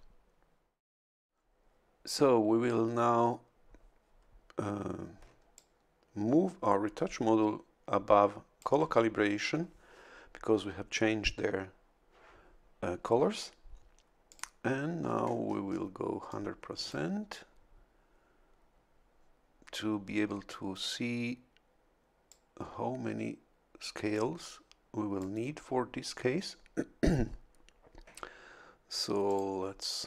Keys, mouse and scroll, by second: 5.5-8.8 ctrl+shift+drag, 14.3 click, 15.0-15.9 scroll up 2, 16.3 click, 22.3-25.4 drag, 29.3 click.